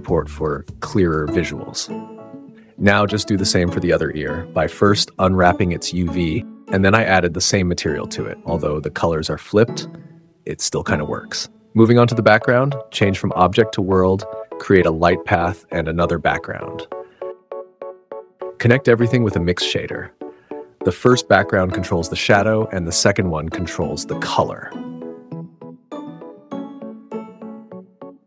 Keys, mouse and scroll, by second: 2.6 click, 3.4 click, 3.7-5.1 middle drag, 5.1 Tab, 5.5 a, 6.0 u, 7.8 Tab, 11.6 click, 13.1 click, 14.9 shift+a, 16.4 click, 17.7 shift+d, 18.4 shift+a, 21.6-22.3 drag, 22.6 click.